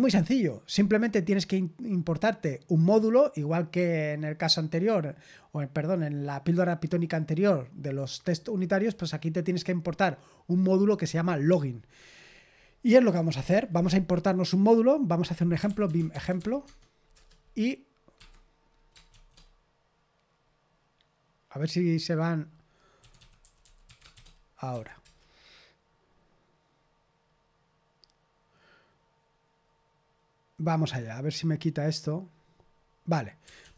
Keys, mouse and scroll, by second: 13.0-15.6 scroll down 1, 15.3-17.5 typing, 18.2 Escape, 19.1 shift+g, 22.7-24.7 typing, 25.0 Return, 33.3-33.7 typing.